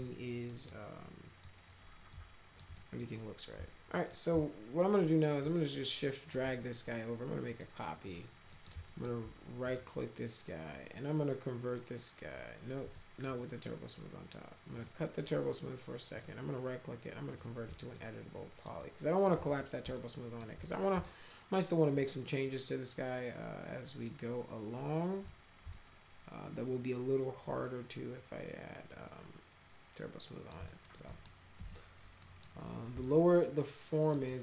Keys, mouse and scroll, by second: 0.5 middle click, 1.5 middle click, 2.1 alt+middle click, 2.8 middle click, 3.9 alt+middle click, 5.5 shift+click, 7.5 click, 8.1 click, 8.5 middle click, 8.9 alt+middle click, 9.7 right click, 12.9 click, 13.3 right click, 14.8 click, 16.1 right click, 17.3 click, 18.0 alt+middle click, 18.8 alt+middle click, 20.0 alt+middle click, 20.6 middle click, 21.1-25.3 alt+middle drag, 25.7-30.5 alt+middle drag, 30.7 middle click, 31.1 middle click, 31.6 F4, 32.2 middle click, 33.1-34.1 alt+middle drag, 34.3 alt+middle click.